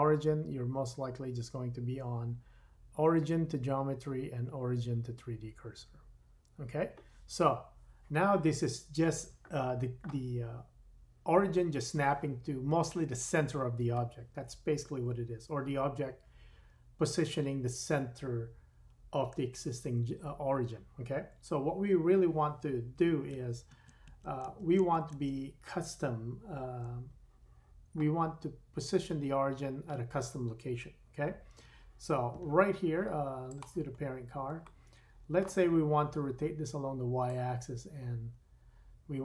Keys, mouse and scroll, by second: 23.4 super+z, 23.7 super+z, 24.1 super+z, 24.4 super+z, 24.4-33.6 super+drag, 24.8 super+z, 25.1 super+z, 31.6 Tab, 33.6-37.2 middle drag, 34.0 scroll up 4, 37.2-39.2 drag.